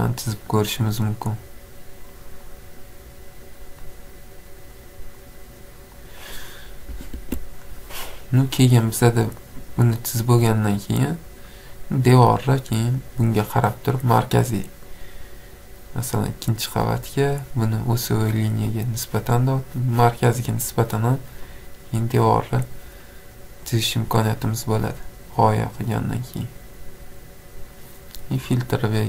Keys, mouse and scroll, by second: 0.2 click, 0.5-1.1 scroll, 1.1 scroll, 2.4 click, 4.0 click, 4.9 click, 6.1 click, 6.3-7.3 scroll, 7.3 Escape, 7.3-8.6 scroll, 9.5 click, 11.1-11.5 scroll, 12.1 scroll, 13.1 click, 15.0 click, 16.5 click, 18.0 click, 18.5 click, 21.6 click, 22.2 click, 22.8-23.5 scroll, 23.8 click, 25.8 click, 27.9 click, 28.7 click.